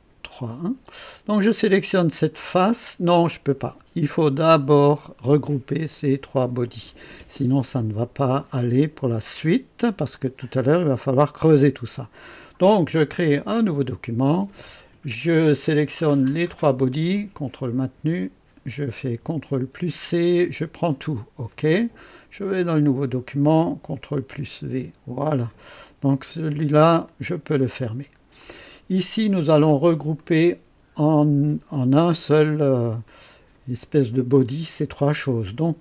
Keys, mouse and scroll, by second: 0.9 click, 2.3 click, 3.5 click, 13.4 click, 15.3 click, 16.2 click, 17.1 ctrl+click, 17.8 ctrl+click, 19.5 ctrl+c, 19.6 ctrl+c, 21.5 click, 22.8 click, 24.0 ctrl+v, 27.0 click, 28.4-29.3 drag, 30.1 click, 33.1-33.8 drag, 33.8-34.5 right drag.